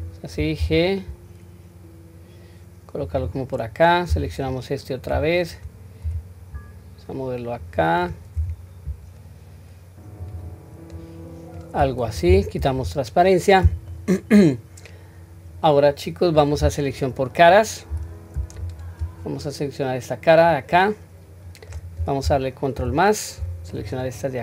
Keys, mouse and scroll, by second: 4.2 alt+click, 6.0 g, 10.9-11.5 middle drag, 12.2 q, 12.6-13.9 middle drag, 14.4-16.5 middle drag, 18.6 click, 19.4-21.7 middle drag, 22.8 ctrl+KP_Add, 24.0-24.4 ctrl+middle drag.